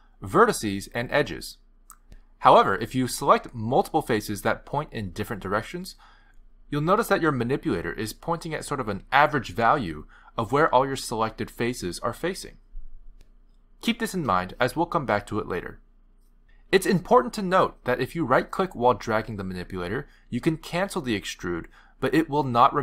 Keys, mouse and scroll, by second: 0.7 click, 1.4 middle click, 7.5 middle click, 9.3 middle click, 10.9 middle click, 14.4 middle click, 15.4 middle click, 19.2 middle click, 20.1 click, 20.5 middle click, 21.5 click.